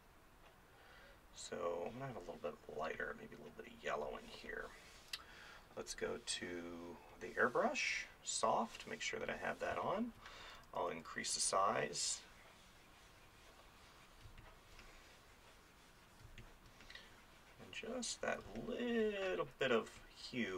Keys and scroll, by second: 9.7 space, 14.3 space, 16.3 space, 18.5 space, 19.5 [.